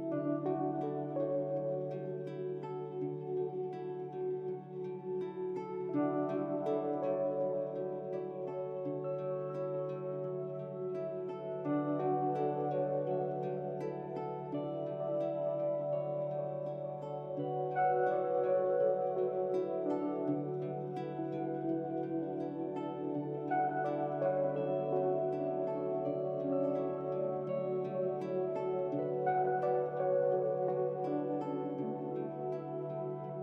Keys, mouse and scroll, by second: 4.8-11.3 drag, 22.5 Tab, 23.8 click, 26.3 alt+shift+click, 29.5 alt+shift+click, 30.2 alt+shift+click.